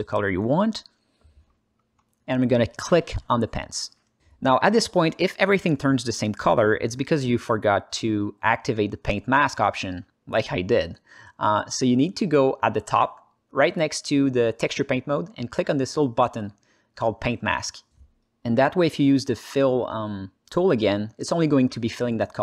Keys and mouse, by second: 2.1 alt+middle click, 2.6 alt+shift+middle click, 3.5 click, 9.7 alt+middle click, 12.6 ctrl+z.